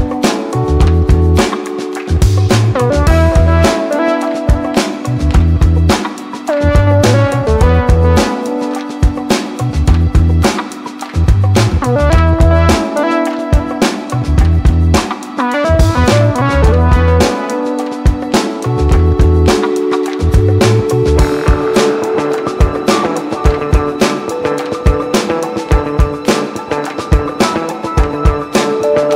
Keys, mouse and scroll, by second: 0.0-3.7 typing, 1.9 scroll up 1, 3.9-8.0 drag, 8.0 right click, 9.5 click, 12.1-15.2 drag, 16.1 scroll up 1, 18.0 click, 20.8 right click, 21.6 click.